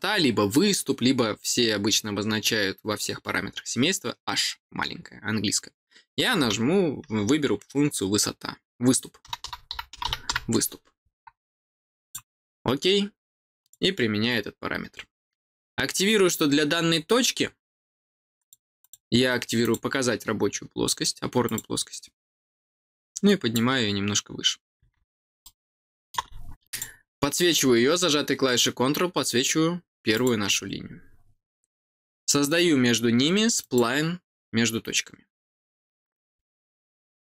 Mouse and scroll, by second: 12.0 click, 13.5 click, 18.3 click, 18.7 click, 19.6 click, 21.4 click, 22.9 click, 25.4 middle click, 26.6 click, 30.1 click, 33.5 click.